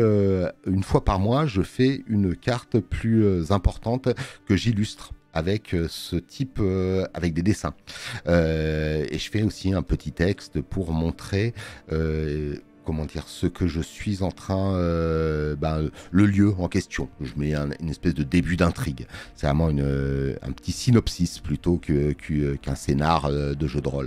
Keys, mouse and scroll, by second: 6.0 alt+middle click.